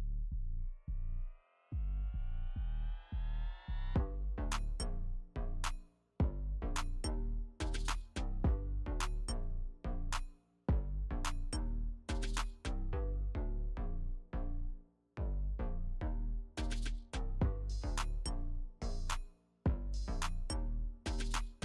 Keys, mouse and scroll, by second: 1.9 click, 3.5 alt+scroll up 1, 6.5 click, 7.3-10.2 typing, 7.3 click, 7.9 click, 8.3 click, 8.7 click, 9.2 click, 9.6 click, 10.1 click, 12.5 click, 13.0 space, 13.1 click, 13.5 space, 13.6 click, 13.7 space, 13.9 click, 14.8 space, 15.2 click, 15.4 space, 16.1 click, 16.3 space, 16.9 click, 17.1 space, 21.1 click.